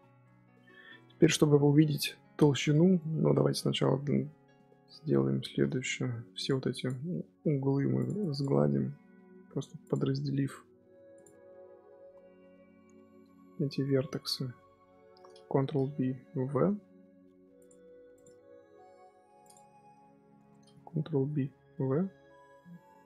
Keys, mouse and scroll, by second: 0.0 scroll down 2, 0.1 middle click, 0.6 Tab, 0.9-2.7 middle drag, 2.7 Tab, 2.9 middle click, 3.3 scroll up 2, 4.1 Tab, 4.6 Tab, 4.8 middle click, 5.7 g, 6.6 click, 6.9 middle click, 7.3 g, 8.1 click, 8.4 middle click, 9.3 g, 10.5 g, 11.2-15.6 middle drag, 15.6 ctrl+b, 18.0 click, 18.5 g, 19.5 Tab, 19.8 middle click, 20.3 Tab, 20.9 ctrl+b.